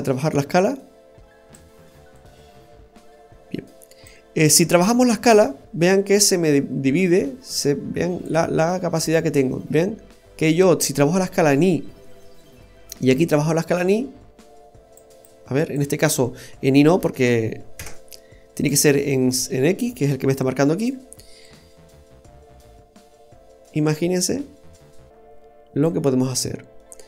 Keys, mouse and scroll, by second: 2.1 click, 5.3 click, 10.0-10.5 scroll down 1, 11.8-13.0 scroll down 2, 12.0 middle click, 13.2 click, 15.1 click, 16.9 BackSpace, 21.4 click, 26.4-27.0 scroll up 4, 26.8 middle click.